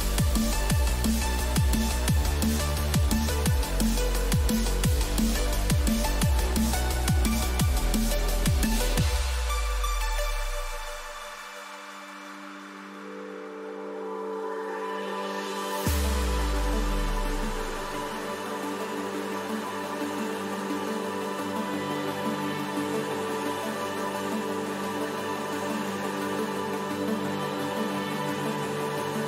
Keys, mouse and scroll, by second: 25.5-26.9 middle drag, 27.7 Tab, 28.6 middle click, 29.2 a.